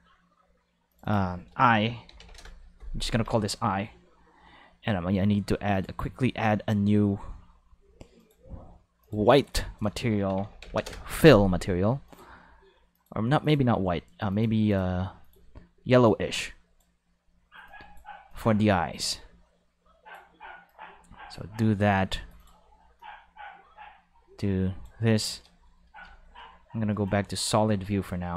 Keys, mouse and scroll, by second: 0.9 click, 1.0 click, 1.7 shift+d, 1.8 5, 2.3 Return, 2.4 5, 3.1 ctrl+5, 5.7 click, 8.2 click, 9.0 click, 9.4 click, 9.9-10.9 typing, 10.8 Return, 12.0 click, 12.9 click, 13.4 click, 14.3 click, 14.7 click, 15.2 click, 16.0-16.8 drag, 17.6 click, 18.3-20.1 drag, 20.6 click, 21.9 click, 22.4 click, 23.0-24.8 drag, 27.2 click.